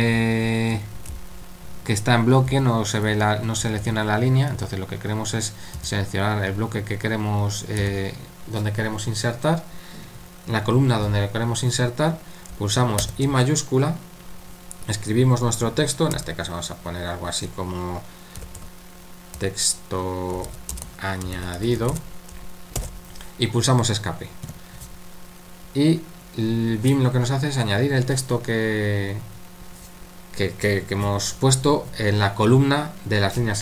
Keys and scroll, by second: 0.0-6.3 typing, 7.5-8.3 typing, 13.0 l, 16.1 typing, 18.1-22.8 typing, 24.5 Escape, 26.2-26.9 typing.